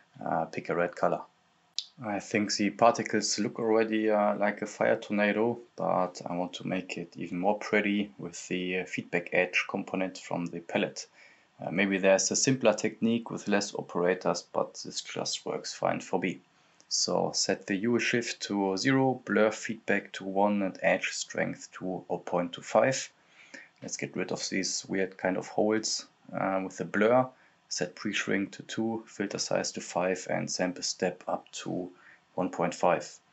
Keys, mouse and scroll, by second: 1.1 click, 1.1-2.4 scroll up 1, 2.4 scroll down 1, 3.1 click, 3.8-4.7 scroll up 1, 4.7 scroll down 1, 5.3 click, 5.8-6.2 scroll down 1, 6.2 click, 7.2 scroll down 1, 7.3-14.5 drag, 14.5 Return, 15.1-17.3 drag, 17.3-20.4 drag, 20.4-23.6 drag, 23.6-24.2 scroll up 1, 24.2 scroll down 1, 24.4 click, 25.0 right click, 25.6-31.0 drag, 31.0 scroll down 1, 31.4-31.7 scroll up 1, 31.7 scroll down 1, 32.0 click, 33.2 s.